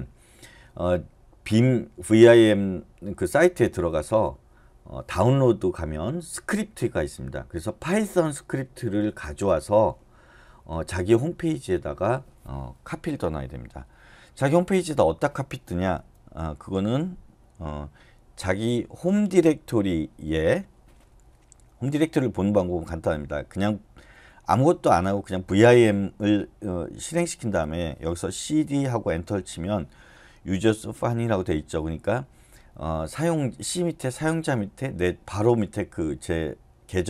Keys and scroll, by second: 27.1 shift+;, 28.4-28.7 typing, 29.0 Return.